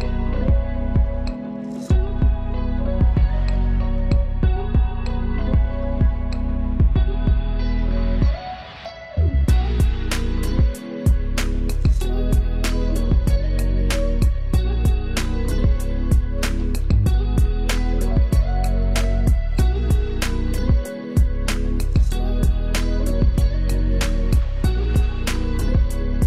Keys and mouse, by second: 0.8 click, 1.3 space, 2.6 ctrl+space, 2.9 ctrl+alt+click, 4.1 ctrl+space, 4.2 ctrl+click, 4.5 ctrl+space, 5.8 ctrl+alt+click, 7.2 ctrl+space, 7.6 ctrl+click, 7.7 ctrl+space, 8.9 ctrl+alt+click, 14.8 click, 18.0 ctrl+e, 19.2 click, 19.8 ctrl+z, 21.5 click.